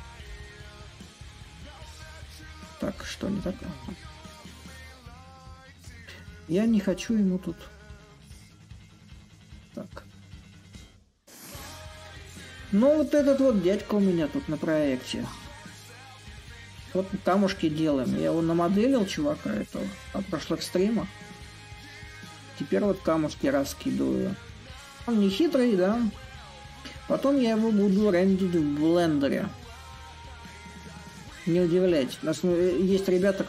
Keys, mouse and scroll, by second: 6.5-8.1 drag, 8.3-13.4 shift+drag, 15.2-27.4 middle drag, 27.4 shift+click, 28.5-32.6 drag.